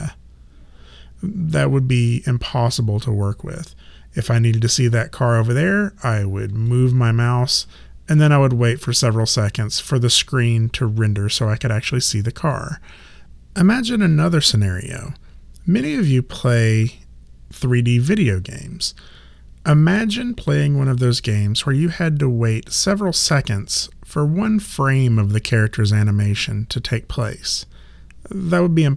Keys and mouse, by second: 6.7 alt+click.